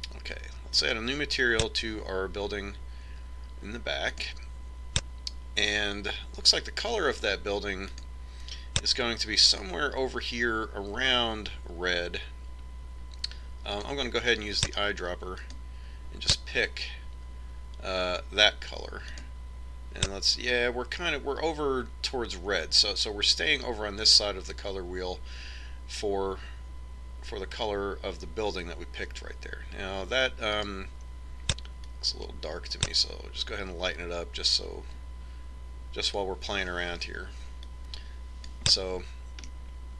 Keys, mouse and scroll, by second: 1.5-3.4 drag, 4.9-6.7 drag, 8.7-10.5 drag, 20.0-21.7 drag, 31.5-33.3 drag, 33.4-36.0 drag.